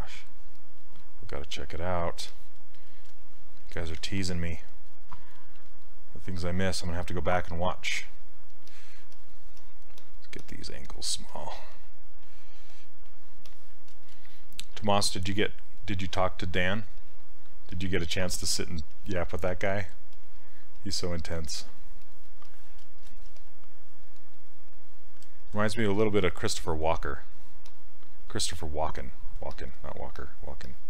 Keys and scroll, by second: 4.0 ctrl+z, 23.3 s, 26.0 s.